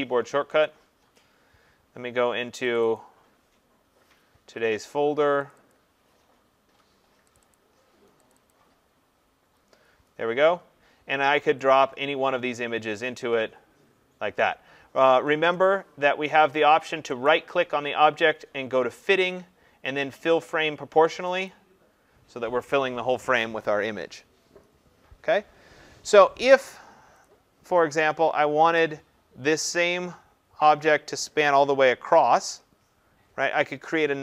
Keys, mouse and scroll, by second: 0.7 click, 2.7 click, 3.0 click, 5.5 click, 5.7 click, 7.4 click, 7.5 click, 8.3 click, 8.5 click, 11.7 click, 13.0 click, 15.6 click, 17.2 right click, 21.5 click, 27.2 click, 32.6 click.